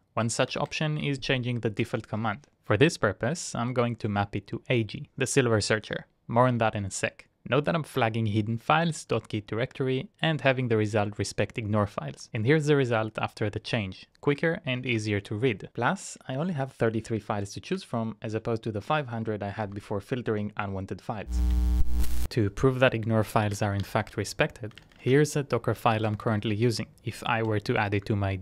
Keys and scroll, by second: 0.0-0.7 typing, 1.8 ctrl+e, 11.8-12.6 typing, 16.4 Up, 16.6 Up, 17.1-17.8 typing, 19.5-28.4 typing, 27.3 ctrl+c.